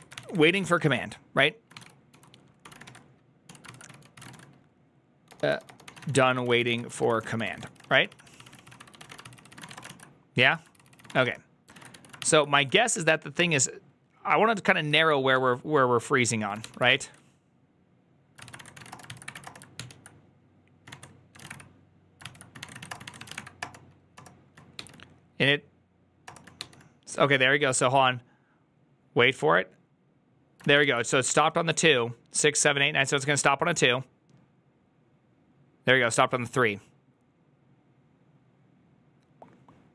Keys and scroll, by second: 0.0-11.8 typing, 0.0 ctrl+c, 0.1 ctrl+c, 10.3 ctrl+u, 10.6 ctrl+c, 11.6 Return, 11.6 ctrl+a, 12.0 ctrl+c, 12.6 ctrl+c, 12.8 Up, 13.2 Return, 14.8 ctrl+a, 15.2 1, 16.5 ctrl+h, 16.8 typing, 18.0-24.6 typing, 22.1 ctrl+c, 26.1-26.5 typing, 30.5 ctrl+a.